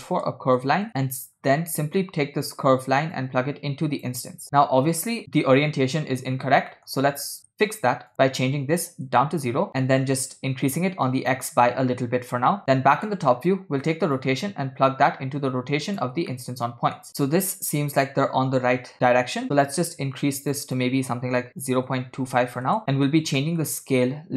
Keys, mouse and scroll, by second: 0.9 click, 3.2-4.2 drag, 4.6-5.2 middle drag, 5.2-6.7 scroll down 3, 6.8 middle click, 7.1-8.1 scroll up 3, 8.1-9.1 drag, 9.7-11.4 drag, 12.6 KP_7, 13.1 middle click, 14.2 click, 14.4-16.1 drag, 16.4 middle click, 19.7 shift+click, 20.6-22.7 shift+drag, 23.5 middle click.